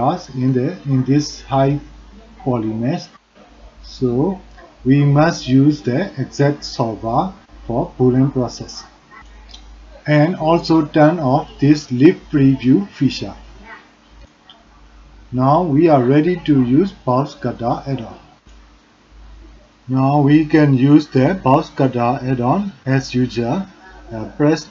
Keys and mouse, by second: 13.3 click, 14.6 click, 15.6 click, 20.8 d.